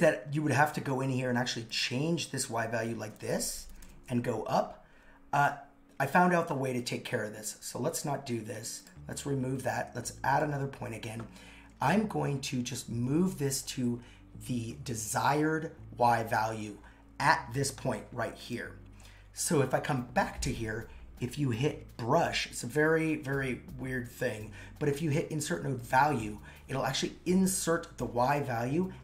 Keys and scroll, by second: 3.0 shift+Up.